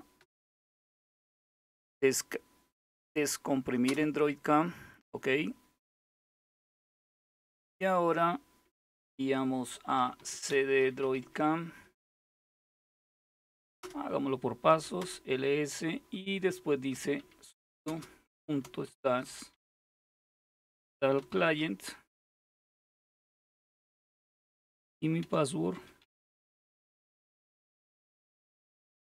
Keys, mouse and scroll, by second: 0.0-0.7 typing, 3.5 Return, 9.4-11.2 typing, 13.4-15.1 typing, 16.3-27.3 typing.